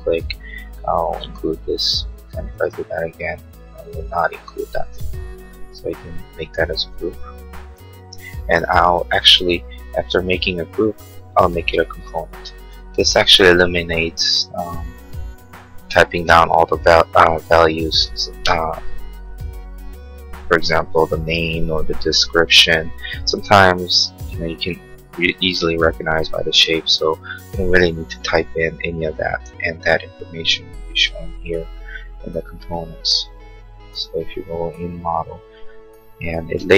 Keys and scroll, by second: 6.7 g.